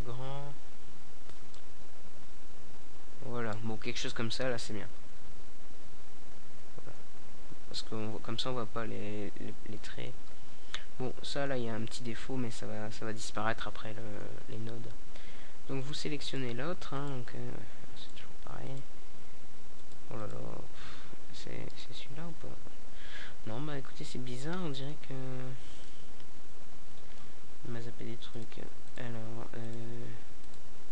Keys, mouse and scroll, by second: 0.0 Escape, 6.9-8.5 drag, 8.6 middle click, 13.5-14.6 right drag, 14.6-19.6 middle drag, 19.2 KP_Decimal, 21.1-22.6 middle drag, 22.7 middle click, 22.9 middle click, 24.8-26.5 right drag, 26.4-27.8 drag, 28.8 middle click, 29.5 KP_0.